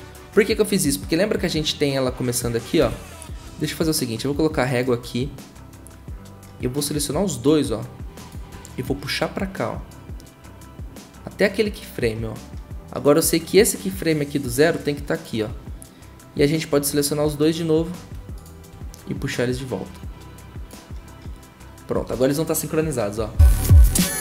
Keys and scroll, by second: 2.8 v, 23.2 0.